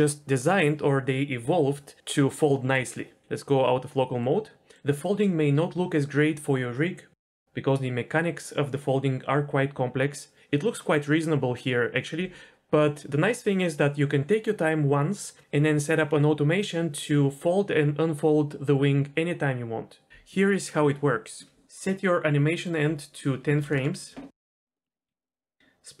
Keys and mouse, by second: 7.1 middle click, 22.9-24.1 drag, 24.7 click, 24.8 middle click, 25.2 KP_Decimal, 25.6 click.